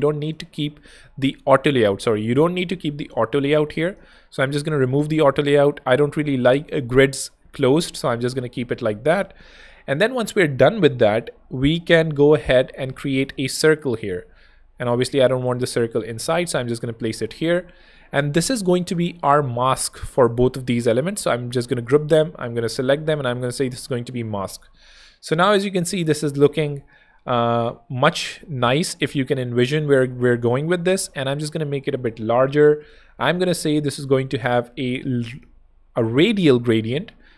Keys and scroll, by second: 5.4 super+x, 6.6 super+x, 12.7 o, 16.2 alt+h, 16.5 alt+v, 21.1 alt+shift+super+(, 21.9 alt+super+g.